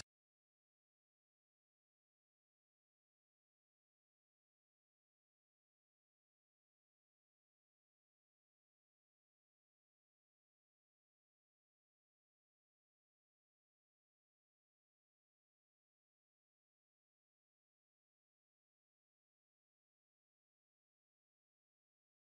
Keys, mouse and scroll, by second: 0.1 z, 3.0 click, 3.4 middle click, 5.7 Tab, 6.9 click, 7.7 click, 9.7 middle click, 12.5 Tab, 13.0 g, 13.3 z, 14.1 click, 14.6 Tab, 15.9 s, 16.1 z, 18.5 click, 18.9 Tab, 19.7 middle click, 22.1 Tab.